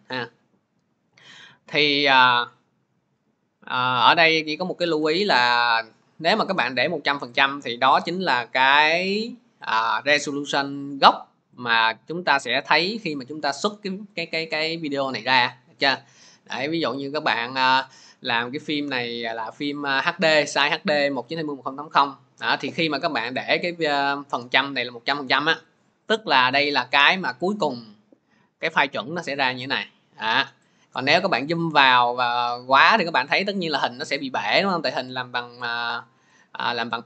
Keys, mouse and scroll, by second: 0.0 middle click, 0.1 middle click, 0.3 middle click, 0.8 middle click, 4.7-5.2 scroll, 5.2-5.8 scroll, 6.3-6.9 scroll, 7.8 click, 9.2-10.3 scroll, 11.4 middle click, 12.4 middle click, 14.3 middle click, 15.1 middle click, 23.1 middle click, 24.5 click, 26.4 middle click, 30.8 middle click, 32.8 middle click, 34.0 middle click, 36.3 click.